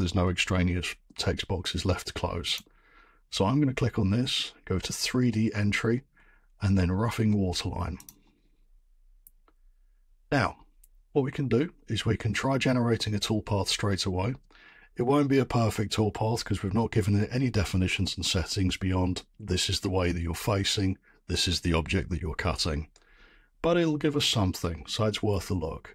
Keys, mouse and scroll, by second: 2.5-7.6 drag, 8.0-13.1 drag.